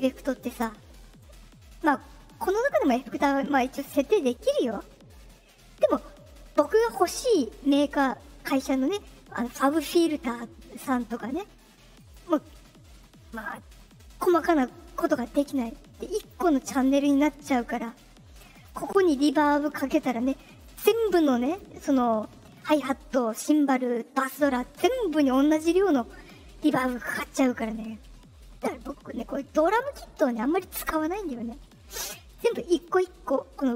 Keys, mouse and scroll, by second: 2.6 click, 11.9 click, 16.1 click, 18.5 click, 19.4 click, 21.3 click, 29.1 right click, 30.3 click, 32.6 click.